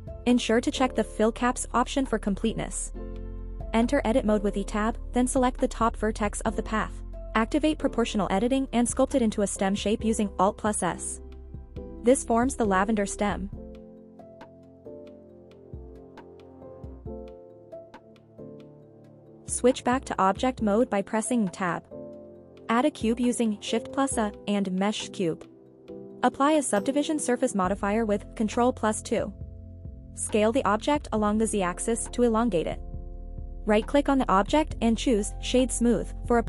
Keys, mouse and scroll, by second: 1.6 click, 3.3-3.6 scroll up 2, 5.2 Tab, 5.6 click, 7.4 click, 10.3 alt+s, 11.6 alt+scroll down 1, 12.5-13.3 scroll down 2, 14.2-17.1 scroll down 11, 18.3 click, 20.6 Tab, 22.2-22.6 scroll up 1, 23.0-23.6 scroll up 1, 26.1 shift+a, 28.6 ctrl+2, 30.9 s, 31.2 y, 31.8 x, 32.5 z, 34.7 click.